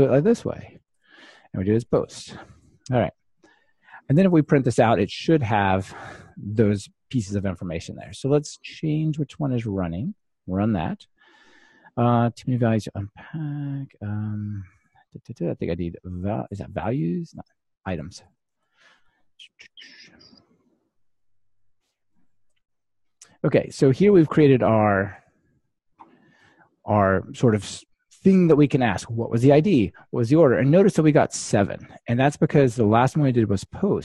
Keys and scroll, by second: 0.1 super+d, 1.0 ctrl+alt+shift+Left, 2.4 alt+super+l, 10.6 ctrl+shift+r, 20.0 super+c, 21.8 super+v, 22.4 ctrl+r.